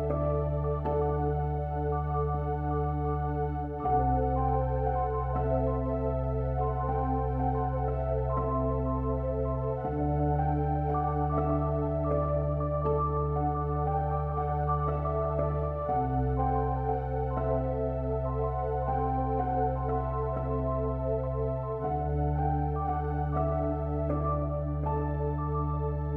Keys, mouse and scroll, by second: 0.0 a, 1.6 a, 3.7 ctrl+f, 7.8 ctrl+r, 11.5 ctrl+r, 15.0 ctrl+r, 20.8 middle click, 21.6-22.7 drag, 22.7 middle click, 22.7 e, 23.7 middle click, 23.9 middle click.